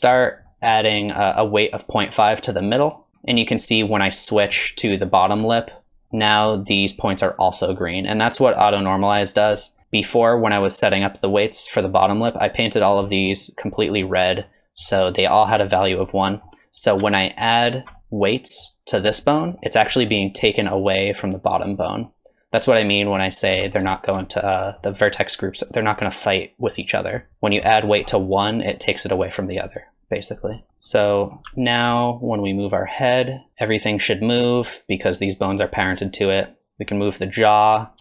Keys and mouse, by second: 0.5 click, 1.0 click, 1.4 click, 1.7 middle click, 2.1 shift+middle click, 2.2 middle click, 2.5 click, 2.9 click, 3.4-4.5 middle drag, 5.8 ctrl+click, 6.0 middle click, 9.6 middle click, 13.1 middle click, 13.9 middle click, 14.4 middle click, 16.3 middle click, 17.6 ctrl+click, 18.0 middle click, 19.2 middle click, 20.0 middle click, 22.1-23.5 drag, 23.9 shift+click, 24.2 middle click, 25.4 click, 26.1 middle click, 26.8 click, 27.7 middle click, 28.7 click, 29.8 click, 30.1 click, 30.6 middle click, 31.1 middle click, 32.5 alt+click, 33.5 r, 37.0 ctrl+click.